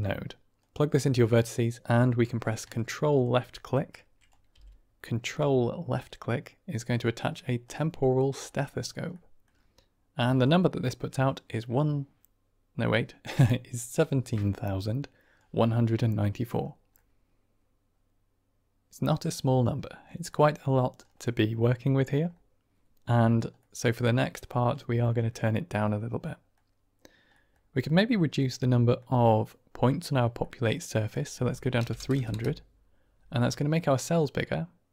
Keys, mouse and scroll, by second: 0.5-1.5 drag, 2.0 click, 3.9-4.2 drag, 4.4 g, 7.5 click, 9.1 click, 10.4-15.3 drag, 16.9-19.1 middle drag, 20.2 middle click, 21.3 middle click, 21.8 middle click, 23.5 middle click, 26.3 middle drag, 27.3 middle click, 28.3-28.9 middle drag, 30.4 middle click, 31.0-32.8 drag, 32.0 KP_0, 33.4-33.8 middle drag, 34.1-34.9 middle drag.